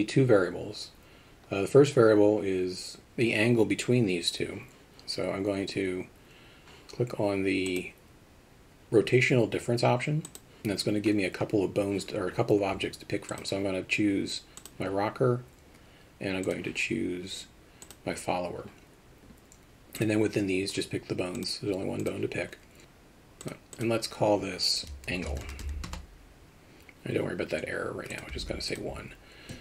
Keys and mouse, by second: 7.8-13.4 drag, 16.5 click, 20.1 click, 21.6 click, 22.8 click, 24.9-28.8 shift+drag.